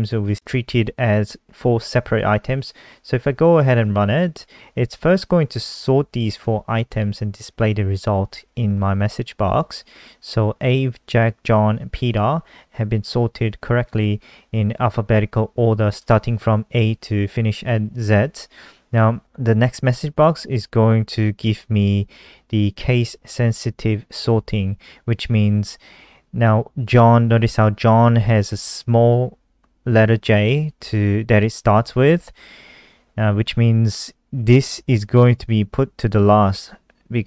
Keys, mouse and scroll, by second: 6.4 ctrl+s, 7.0 F5.